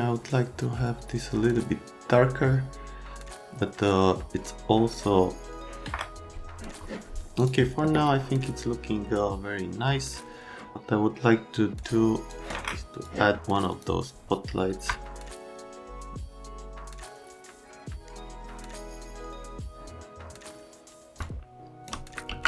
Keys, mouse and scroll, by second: 7.3 click, 12.3 click, 13.7 click, 14.9 F3, 21.2 shift+click, 22.2 ctrl+z.